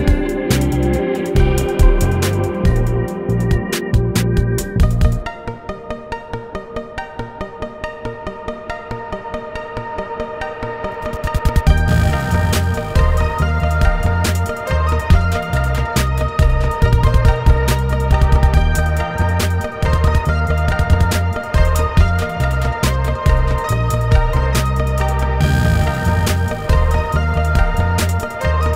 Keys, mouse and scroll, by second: 0.0-23.2 typing, 1.0 middle click, 1.4 middle click, 1.5 middle click, 1.5 click, 1.6 middle click, 2.2 shift+middle click, 2.4 click, 2.6 scroll down 2, 2.6 middle click, 2.8 middle click, 3.3 shift+middle click, 3.4 alt+click, 3.7 shift+middle click, 4.3 middle click, 4.8 middle click, 5.0 shift+middle click, 6.0 shift+middle click, 6.0 scroll up 1, 6.4 middle click, 6.6 scroll up 4, 6.7 middle click, 7.5 shift+middle click, 8.0 alt+click, 8.2 scroll up 2, 8.6 middle click, 8.8 middle click, 9.1 middle click, 9.5 shift+middle click, 9.5 scroll up 2, 9.6 middle click, 9.8 Tab, 10.3 shift+middle click, 10.5 click, 11.0 middle click, 11.1 scroll up 2, 11.3 shift+middle click, 11.6 shift+middle click, 12.1 shift+middle click, 12.3 middle click, 12.4 Tab, 12.6 scroll up 4, 13.0 middle click, 13.3 Tab, 13.4 middle click, 13.4 click, 13.6 middle click, 13.8 middle click, 14.3 middle click, 15.1 scroll down 3, 15.1 shift+middle click, 15.7 middle click, 15.8 ctrl+r, 16.1 middle click, 16.2 alt+click, 16.5 middle click, 16.6 click, 16.7 middle click, 16.9 middle click, 17.0 shift+click, 17.4 middle click, 17.8 middle click, 18.1 middle click, 18.3 middle click, 18.4 scroll up 6, 18.5 scroll down 1, 18.5 middle click, 18.6 middle click, 19.3 middle click, 19.5 middle click, 19.9 shift+middle click, 20.6 shift+middle click, 20.6 alt+click, 21.0 middle click, 21.0 scroll down 1, 21.1 Tab, 21.1 middle click, 22.2 middle click, 22.4 Tab, 22.6 click, 22.8 middle click, 23.0 middle click, 23.4 middle click.